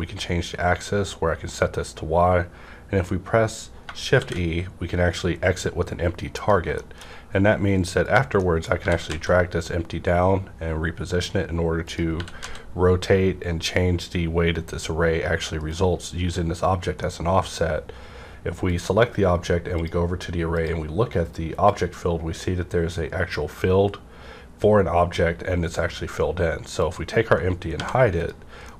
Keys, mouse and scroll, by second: 0.3 scroll up 1, 3.9 shift+Num_Lock, 3.9 scroll up 1, 4.1 shift+e, 6.3 click, 6.7 shift+middle click, 8.0 click, 8.3 middle click, 8.7 typing, 8.8 middle click, 11.9 click, 11.9 z, 12.1 r, 12.4 z, 15.6 right click, 15.6 z, 16.9-19.7 middle drag, 18.6 click, 19.7 click, 26.8 click, 27.7 h, 28.1 click, 28.6 middle click.